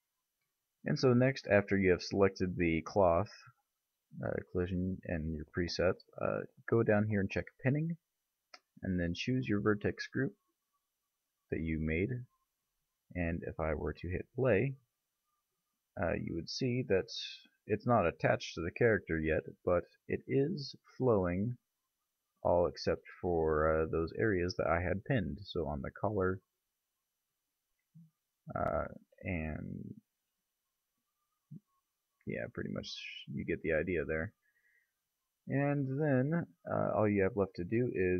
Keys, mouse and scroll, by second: 2.6 middle click, 4.7-6.5 middle drag, 7.8-11.0 drag, 14.5 click, 19.7-20.9 middle drag, 24.5-28.1 middle drag, 27.5 KP_Divide, 29.5 middle click, 31.1-32.5 middle drag, 35.7 click, 37.9 KP_Divide.